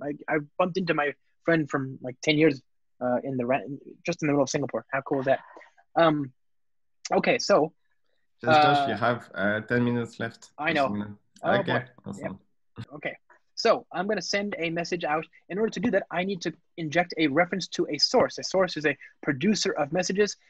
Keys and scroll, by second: 15.6 Return, 17.2 ctrl+space, 18.8 alt+Return.